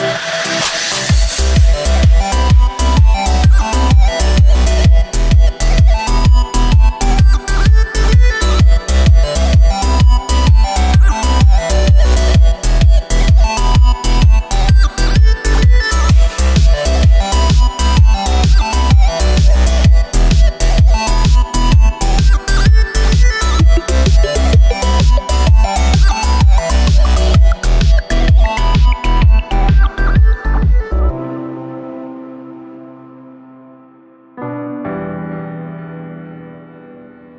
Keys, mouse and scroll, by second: 0.6-0.9 scroll up 3, 0.9-3.8 middle drag, 3.8 ctrl+KP_3, 5.0 g, 8.9-9.4 scroll down 2, 9.4 right click, 10.5 s, 12.7 right click, 13.6 g, 16.8-17.1 drag, 17.1 shift+a, 20.0 s, 21.3-21.8 scroll up 4, 21.8 Tab, 23.1 ctrl+r, 25.2 3, 25.5 right click, 26.2 alt+shift+right click, 28.3-29.4 middle drag, 29.4 shift+right click, 31.1 scroll down 1, 32.1 KP_1, 33.7 ctrl+KP_3, 34.0-34.8 scroll up 2, 34.8-35.9 shift+middle drag, 35.9 alt+s.